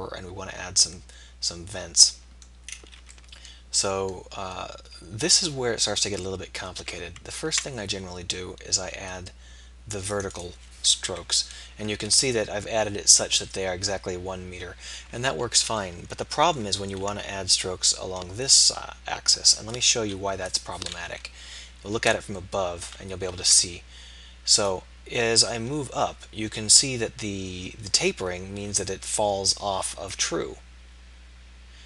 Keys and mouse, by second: 1.0 middle click, 7.3 ctrl+r, 11.1 KP_3, 16.1 middle click, 17.0 ctrl+r, 21.1 KP_7, 23.4 ctrl+r.